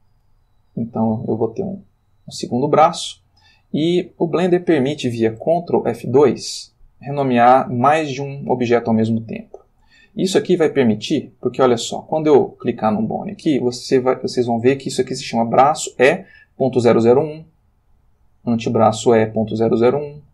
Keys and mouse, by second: 1.1 g, 2.1 click, 5.9 ctrl+F2, 11.1 Escape, 12.0 click, 17.8 click.